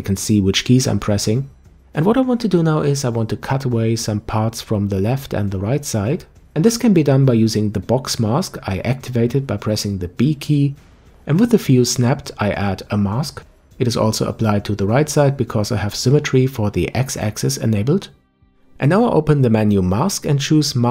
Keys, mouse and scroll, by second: 0.4 n, 2.0-3.3 middle drag, 3.3 KP_5, 7.5 b, 15.6-18.6 middle drag, 19.1-20.9 drag.